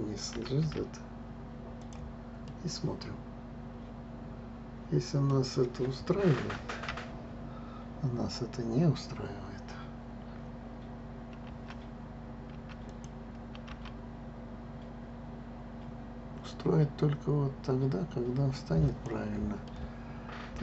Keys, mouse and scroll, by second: 0.3 g, 2.4-5.5 middle drag, 11.5 g, 19.6-20.6 middle drag.